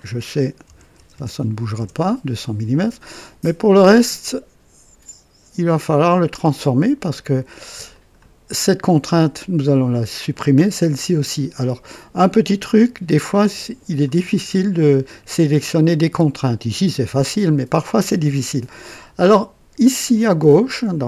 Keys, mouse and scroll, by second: 0.7 KP_2, 0.9 KP_0, 1.1 KP_0, 1.8 Return, 7.9 click, 12.6-14.2 drag.